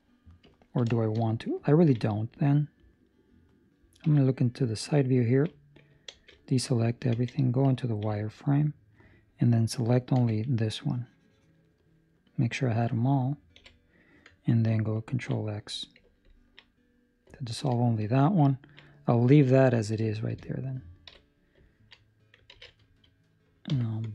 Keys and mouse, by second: 0.5 ctrl+middle click, 0.9 shift+middle click, 1.2 middle click, 1.6 ctrl+middle click, 2.1 middle click, 4.0 KP_3, 4.7 ctrl+middle click, 6.1 alt+a, 7.1 z, 7.7 ctrl+middle click, 10.1 c, 12.1 middle click, 13.5 KP_3, 15.0 ctrl+x, 16.2 ctrl+middle click, 16.7 middle click, 17.3 ctrl+middle click, 17.7 shift+middle click, 18.5 ctrl+middle click, 20.0 shift+middle click, 21.0 KP_3, 21.6 ctrl+middle click, 22.5 alt+a, 22.8 Escape, 23.6 b.